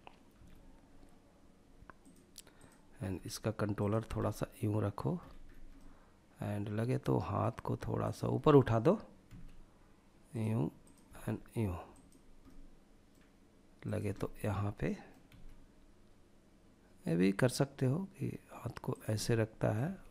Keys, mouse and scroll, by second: 1.7 click, 2.2 g, 2.9 drag, 3.2 scroll down 1, 3.3-4.1 middle drag, 4.3-5.3 scroll up 3, 4.9-6.5 middle drag, 7.2 click, 7.5 middle click, 8.4 g, 9.4-10.1 drag, 10.2 g, 11.1-11.6 drag, 11.6-12.2 middle drag, 13.0 click, 13.3-14.2 middle drag, 14.4 g, 18.1 click, 18.9 middle click, 19.0 g, 19.5 click, 19.8 scroll down 2, 20.0-20.1 middle drag.